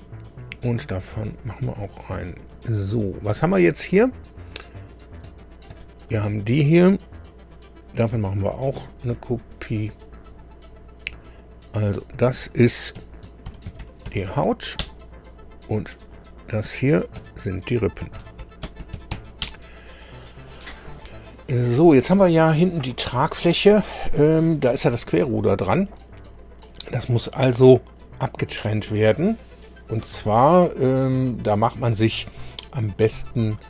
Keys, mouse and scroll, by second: 1.2 click, 4.7 click, 5.2 space, 5.7 space, 6.1 click, 9.2 click, 10.4-10.7 scroll down 2, 11.3 click, 13.0 F2, 13.2-14.5 typing, 14.8 Return, 16.1 click, 17.2 F2, 17.9-19.6 typing, 29.9 scroll down 2, 30.9-31.3 scroll up 2, 31.7-32.0 scroll down 2, 33.4 click.